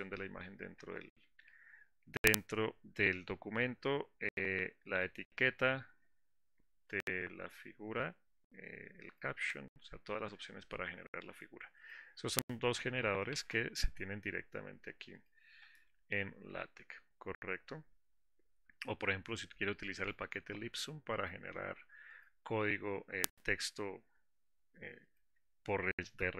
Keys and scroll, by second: 13.6 alt+Insert.